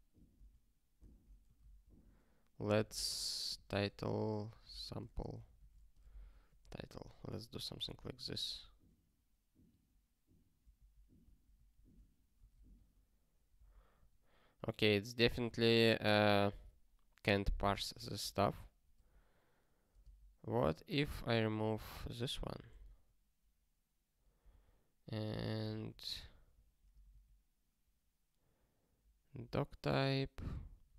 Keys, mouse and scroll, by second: 1.0 alt+<, 1.6 Return, 1.8 ctrl+p, 2.4-7.0 typing, 7.7 super+b, 8.8 ctrl+k, 10.7 ctrl+n, 11.2 ctrl+p, 11.5 ctrl+n, 11.7 ctrl+p, 12.8 ctrl+k, 22.3 super+o, 22.9 ctrl+k, 25.1 q.